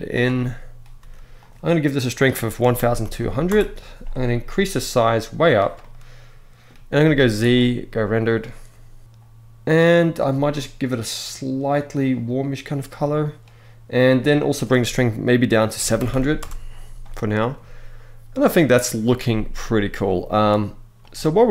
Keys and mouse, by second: 0.0-0.4 middle drag, 0.6 r, 1.9-3.2 drag, 2.8 0, 4.4 click, 5.4-6.3 middle drag, 6.7 z, 10.0 click, 14.0-16.1 drag, 15.8 0, 20.0 z.